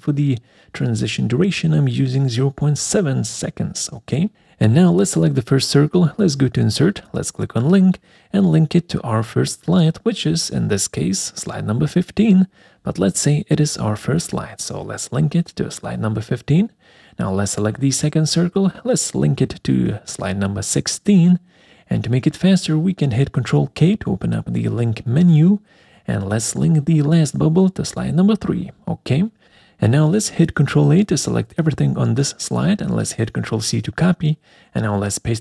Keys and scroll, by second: 0.0-0.1 typing, 23.0 ctrl+k, 31.3 ctrl+a, 32.5 ctrl+c.